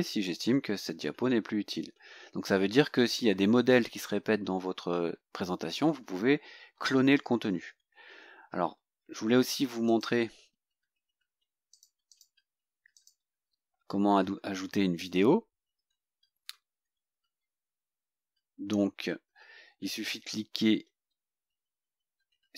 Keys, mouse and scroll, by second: 9.9 click, 11.0 Delete, 11.8 click, 12.2 click, 12.4 Delete, 13.0 click.